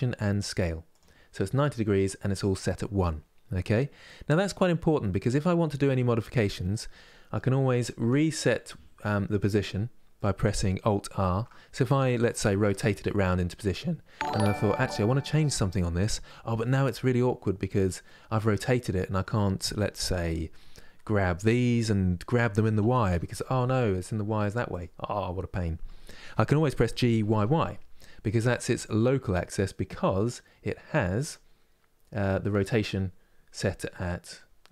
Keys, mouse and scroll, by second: 4.1-12.1 middle drag, 12.1 r, 12.7-15.7 middle drag, 15.9-19.9 middle drag, 19.9 Tab, 22.5 g, 30.9-33.9 drag.